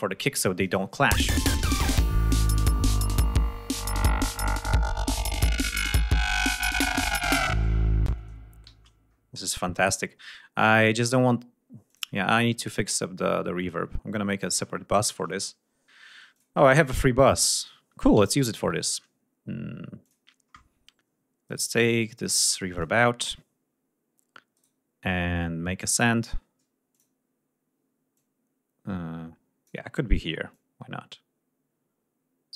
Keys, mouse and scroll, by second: 0.6 click, 1.1 space, 1.4 ctrl+scroll up 2, 4.1 ctrl+scroll down 2, 4.5 ctrl+scroll up 2, 7.9 ctrl+scroll down 2, 8.2 ctrl+space, 8.8 g, 8.9-9.4 scroll up 1, 9.6-10.2 scroll down 1, 12.0 click, 12.8 scroll up 2, 13.7-14.4 scroll down 4, 16.4 click, 18.4 ctrl+Up, 19.4-19.9 scroll up 4, 20.1 click, 21.5 right click, 22.8 click, 24.6 right click, 27.0 click, 28.2-29.9 drag, 30.6-32.5 drag.